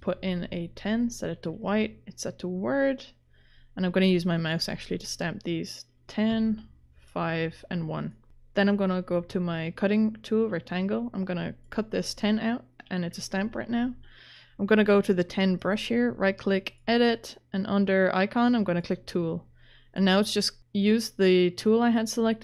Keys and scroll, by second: 0.0-0.1 typing, 6.3 5, 13.5 ctrl+z.